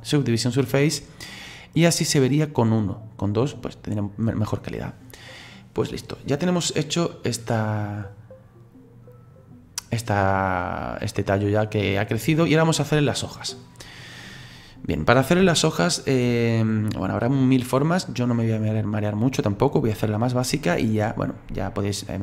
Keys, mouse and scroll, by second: 3.9 right click, 6.4-9.4 drag, 15.6-21.0 shift+middle drag.